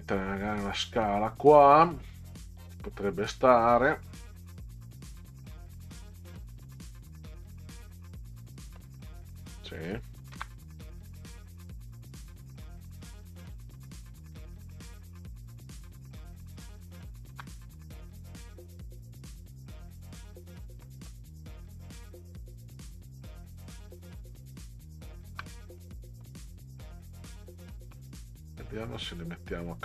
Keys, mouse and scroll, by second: 2.1-8.7 middle drag, 9.4 click, 10.3 ctrl+v, 14.7-16.8 ctrl+drag, 20.9 middle drag, 22.2-25.3 ctrl+drag, 25.8-26.2 middle drag, 27.3-29.8 drag.